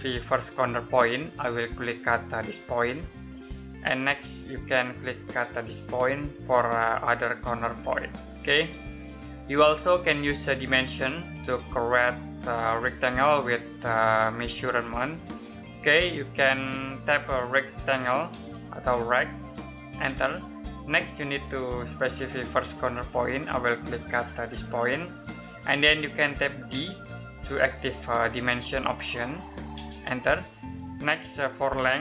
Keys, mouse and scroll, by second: 2.7 click, 7.7 click, 9.0 middle click, 17.3-18.2 typing, 19.9 space, 24.4 click, 26.6 d, 29.6 space.